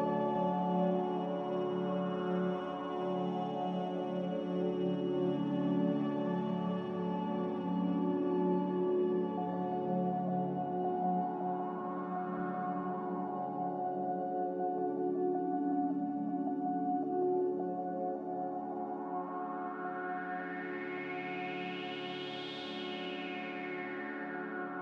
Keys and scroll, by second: 0.4 f, 5.9 m.